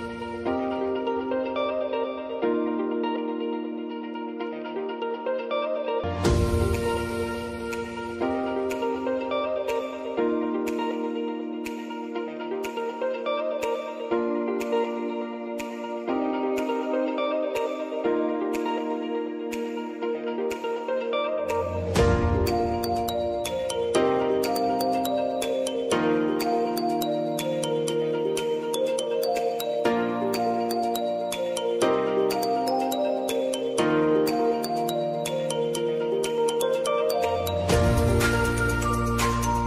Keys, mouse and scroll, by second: 2.9 F9, 3.7-7.1 drag, 7.1-9.8 drag, 9.8 space, 10.6 click, 11.7 space, 13.6-17.0 drag, 17.0 j, 18.1-23.0 drag, 23.0 space, 24.5 click, 24.7 space, 26.0-27.8 drag, 27.8 F9, 28.9-34.5 drag, 34.5-37.8 drag, 37.8-39.6 drag.